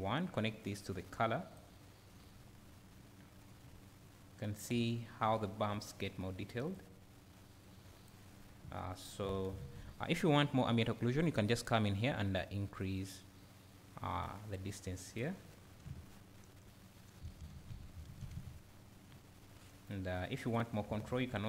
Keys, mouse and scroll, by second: 0.6-19.9 drag, 3.7 `, 4.9-5.3 scroll up 1, 5.3 `, 8.4 scroll down 1, 8.6 `, 15.5 scroll down 1, 15.8 `, 19.2-19.8 scroll up 1.